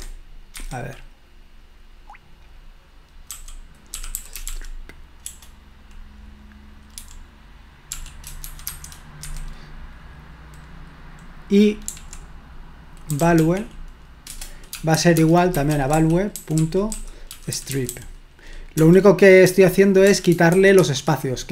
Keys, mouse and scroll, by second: 0.6 Escape, 3.3-5.3 typing, 7.0-8.7 typing, 9.2 Escape, 11.9 typing, 12.9-20.8 typing, 14.3 Return.